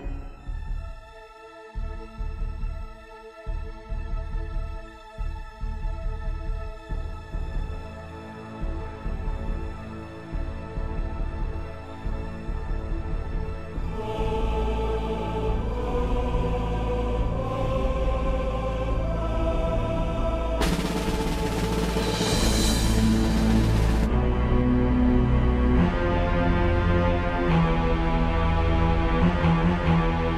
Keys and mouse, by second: 0.7 click, 3.4-6.4 drag, 7.8 KP_Add, 8.1 KP_Add, 8.3 KP_Add, 8.7 KP_Add, 9.9 click, 11.5 click, 13.0 click, 14.7 click, 17.3 click, 18.5 click, 19.7 click, 21.2-22.9 drag, 24.0 click, 25.6 click, 29.1-30.3 drag.